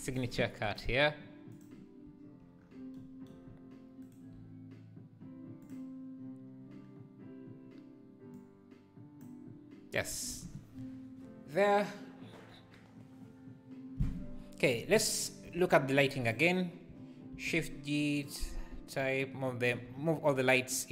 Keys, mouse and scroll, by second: 0.7-2.2 drag, 2.6 scroll down 4, 4.1-6.2 shift+right drag, 6.2-8.4 drag, 10.4 ctrl+s, 16.4 click, 17.4 shift+g.